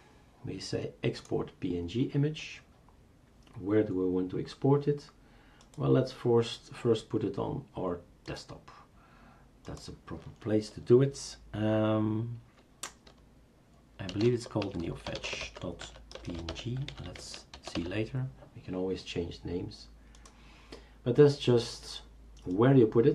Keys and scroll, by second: 13.9-18.4 typing.